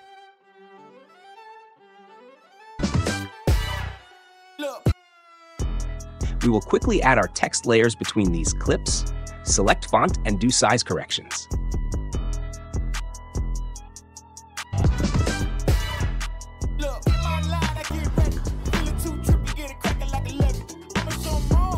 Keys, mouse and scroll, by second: 0.2 click, 1.6 click, 2.4 click, 2.7 space, 4.8 space, 6.2 click, 6.5 click, 7.0 click, 8.2 click, 8.2-9.4 typing, 9.4 click, 10.3 click, 10.6 click, 11.2 drag, 12.7 click, 13.4 click, 14.1 click, 14.6 space.